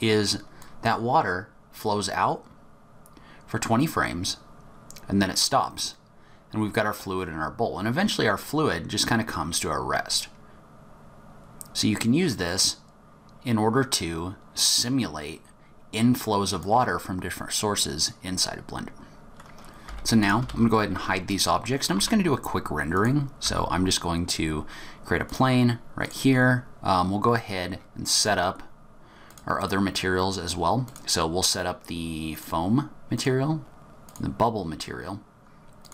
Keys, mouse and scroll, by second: 0.6 click, 18.2-18.6 scroll down 1, 18.6-19.2 scroll up 1, 19.2 middle click, 19.2 click, 19.8 h, 20.2 click, 20.4 h, 20.8-21.2 scroll down 4, 21.2 middle click, 21.9 shift+a, 23.4 s, 26.0 click, 27.4-29.0 scroll down 14, 29.2 click, 29.7-30.1 scroll down 3, 30.8 click, 33.1 click, 35.8 click.